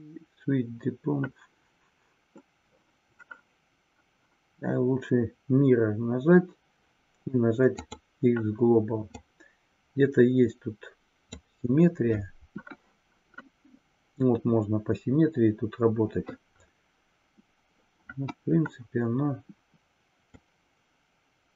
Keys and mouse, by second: 9.2-11.5 drag, 20.4-21.5 drag.